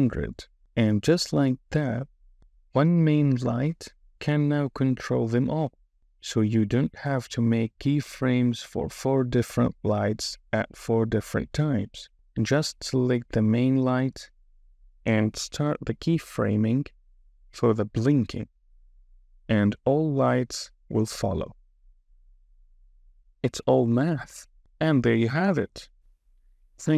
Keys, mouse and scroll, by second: 6.5 click, 7.8-9.0 drag, 8.6 KP_0, 10.9 click, 10.9 KP_0, 11.5 KP_0, 18.1 click, 19.1 Right, 19.4 Right, 19.4 click, 20.2 Right, 20.4 click, 20.8 KP_0, 21.5 Right, 21.7 Right, 21.7 click, 22.1 click, 22.2 Right, 22.4 Right, 22.4-23.0 drag, 22.7 KP_0, 23.3 click, 23.6 Right, 23.7 click, 24.3 click, 24.4 click, 24.5 click, 24.5 space, 25.0 space.